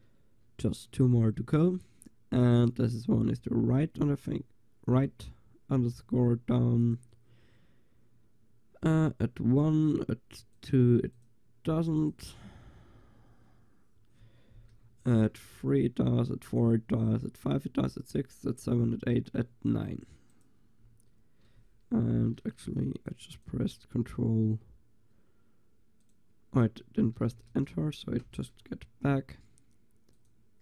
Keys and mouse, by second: 6.9-13.1 drag, 13.1 Delete, 23.1-27.6 drag, 27.6 BackSpace, 30.2-30.6 drag.